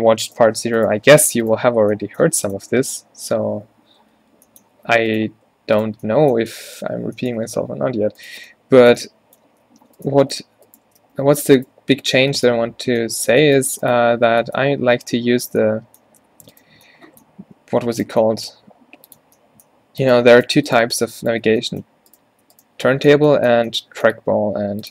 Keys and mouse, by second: 0.4-1.8 drag, 1.8 f, 3.7 ctrl+z, 4.3 a, 7.0 click, 8.1 alt+w, 11.1 f, 11.8 q, 12.0 q, 12.2 q, 16.6 middle click, 18.7 e, 19.8 g, 21.5 f, 24.3 g.